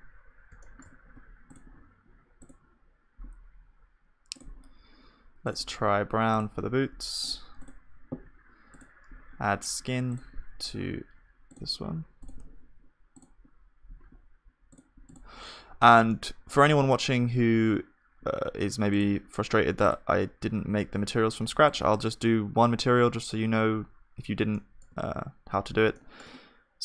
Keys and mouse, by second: 0.1 middle click, 16.7-21.8 middle drag, 24.5-26.8 middle drag.